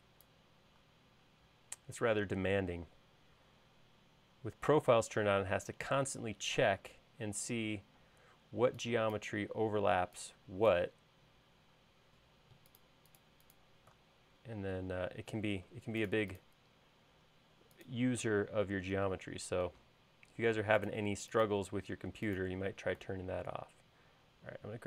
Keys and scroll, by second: 8.1 space.